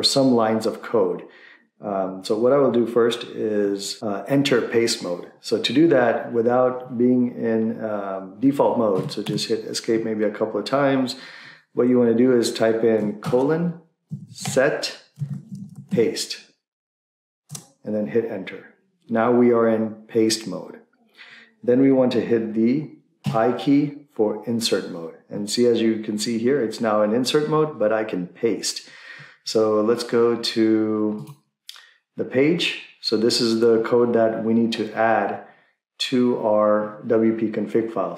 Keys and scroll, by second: 9.1 Escape, 9.3 Escape, 13.2-16.4 typing, 17.4 Return.